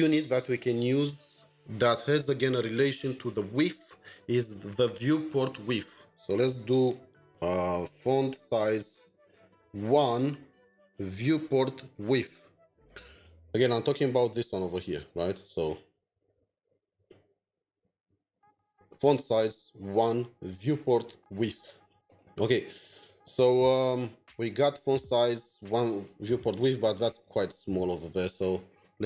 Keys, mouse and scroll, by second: 8.3-9.3 typing, 11.0 typing, 12.8 typing, 12.8 Return, 15.7 Return, 21.9 alt+\, 22.8 double click, 29.0 double click.